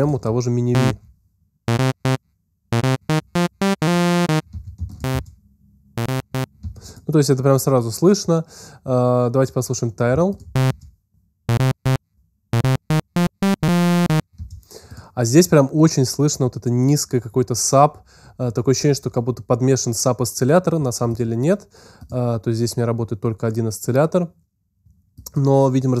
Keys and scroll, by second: 0.7 alt+space, 1.2 space, 4.6 alt+space, 5.9 space, 6.4 space, 10.5 alt+space, 11.3 space.